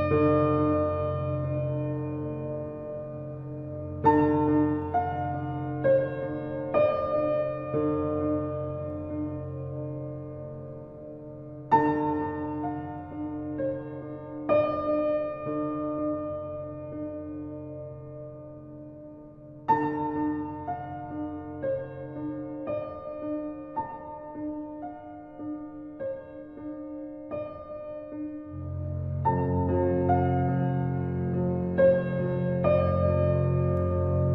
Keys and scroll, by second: 4.4 ctrl+t, 19.6 ctrl+t, 26.8 ctrl+z, 32.7 ctrl+l.